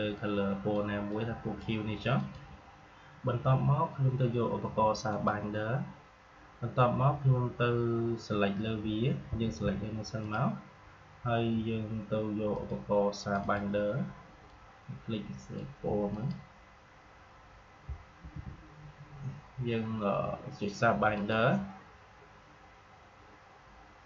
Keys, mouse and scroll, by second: 0.0-2.1 drag, 5.0 click, 9.3 v, 10.1-16.0 drag, 18.1 ctrl+z, 21.0 click.